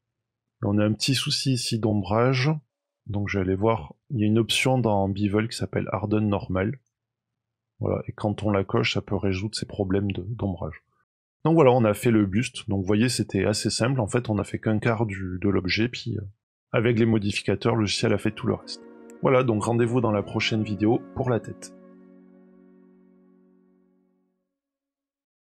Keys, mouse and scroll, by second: 1.2 middle click, 2.8 click, 3.3-3.7 scroll down 1, 5.1-6.5 scroll down 3, 6.5 click, 7.2 middle click, 9.9 middle click, 10.6-12.0 scroll down 2, 11.0 middle click, 12.0 middle click, 13.8 Tab, 15.7 Tab, 16.6-17.9 scroll up 9, 17.9 click, 17.9-18.5 scroll up 1, 18.5 click.